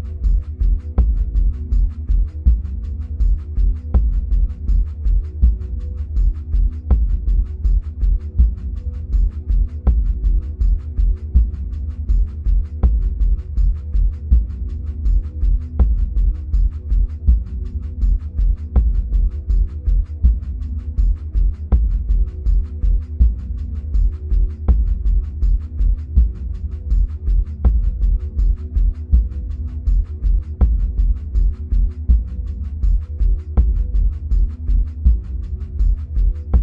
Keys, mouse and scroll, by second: 11.3-27.6 middle drag, 13.2-14.8 scroll up 2, 14.8-16.2 scroll down 2, 16.2 scroll down 1, 21.1-21.9 scroll down 2, 24.5-25.2 scroll up 2, 25.2-25.6 scroll up 1, 25.6-26.9 scroll down 2, 26.9-27.6 scroll down 1, 27.6-36.6 drag.